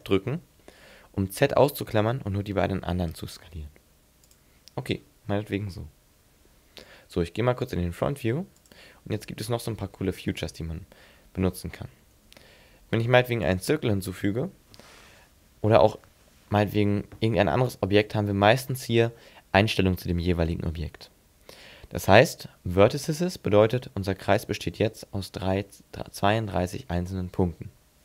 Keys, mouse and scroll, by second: 4.4 click, 9.7-11.2 scroll up 4, 10.4 shift+middle click, 11.2-11.6 scroll down 2, 11.6 scroll up 2, 12.1 shift+a, 24.3 middle click.